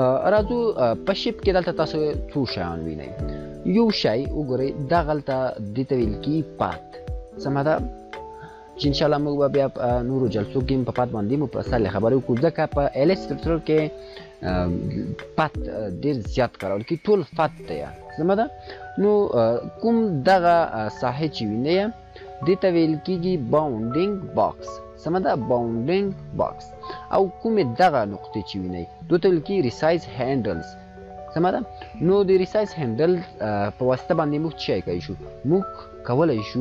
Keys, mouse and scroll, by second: 9.3 click, 15.6-16.6 drag.